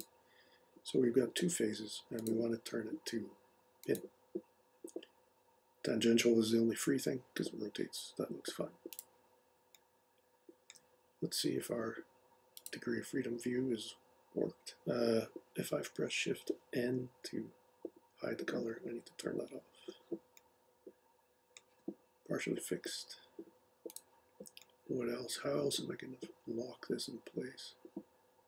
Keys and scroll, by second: 18.5 shift+n.